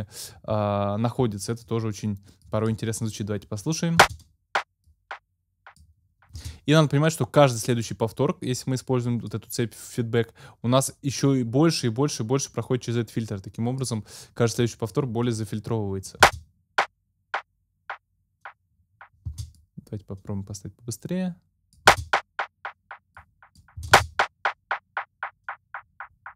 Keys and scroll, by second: 4.0 space, 6.4 space, 16.2 space, 19.3 space, 21.9 space, 23.8 space.